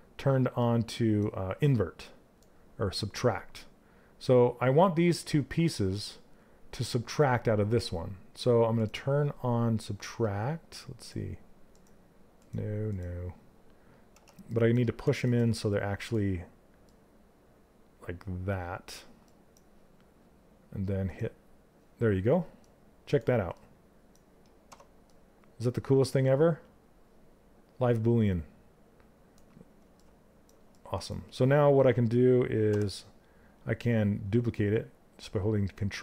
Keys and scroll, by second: 13.6 w, 32.3 w.